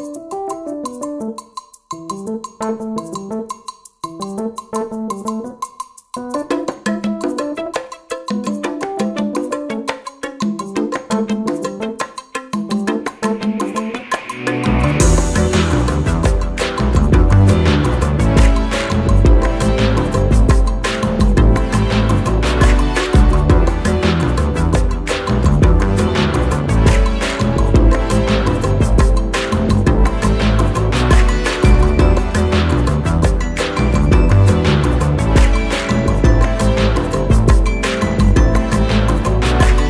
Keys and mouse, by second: 2.6-3.6 drag, 9.0 Right, 10.4 click, 10.8 i, 11.3 click, 19.6 click, 21.1 shift+click, 22.4-23.4 drag, 31.2 right click, 33.8 click, 36.4 click, 38.8-39.8 drag.